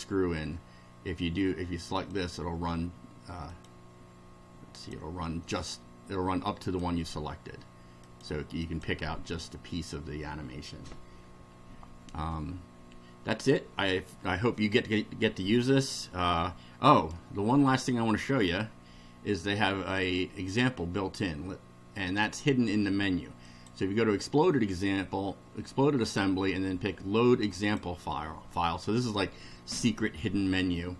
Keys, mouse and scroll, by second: 2.1 click, 3.5 click, 4.8 click, 6.6 click, 8.1 click, 8.7 click, 17.0 click, 18.4 click, 23.5 click, 27.6 click.